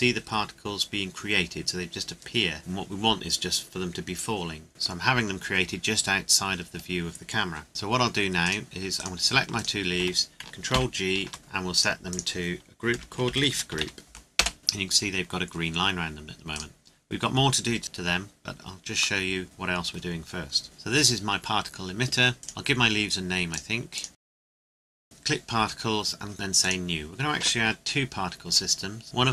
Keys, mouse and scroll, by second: 4.7 middle click, 4.9 scroll down 1, 6.6 scroll up 1, 7.7 click, 8.4 click, 9.0 right click, 9.5 shift+right click, 10.7 ctrl+g, 11.7 click, 12.9 Home, 13.2-13.8 typing, 14.4 Return, 15.9-16.5 scroll down 1, 16.5 right click, 19.2 middle click, 20.6 right click, 23.5 click, 24.4 right click, 24.5 click, 24.6 shift+l, 24.7 Return, 24.8 right click, 25.0 click, 26.6 click, 29.0 Return.